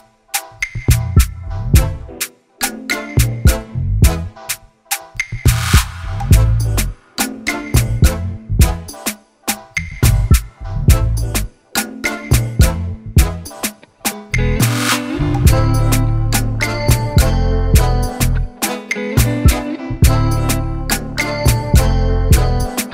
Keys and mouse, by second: 0.8 click, 2.4 ctrl+z, 2.8 ctrl+z, 3.1 ctrl+z, 4.1 click, 4.8 shift+click, 6.2 click, 7.7 shift+click, 8.7 click, 10.0 shift+click, 11.1 ctrl+y, 11.7 ctrl+t, 14.2 click, 15.2 click, 15.8 Return, 16.8 click, 21.5 click, 22.8 ctrl+z.